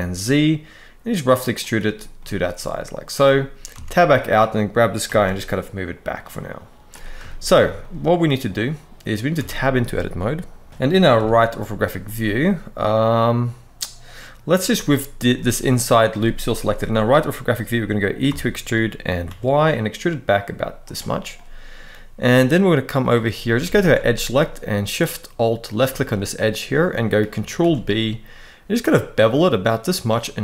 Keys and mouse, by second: 1.3 click, 1.9 middle click, 3.4 Tab, 4.7 g, 5.0 y, 6.6 click, 7.0 shift+middle click, 7.5 middle click, 9.1 Tab, 10.9 KP_3, 14.4 middle click, 15.1 middle click, 16.3 KP_3, 18.0 e, 18.9 y, 20.5 click, 21.0 middle click, 23.3 alt+a, 25.3 alt+shift+click, 25.7 middle click, 27.3 ctrl+b.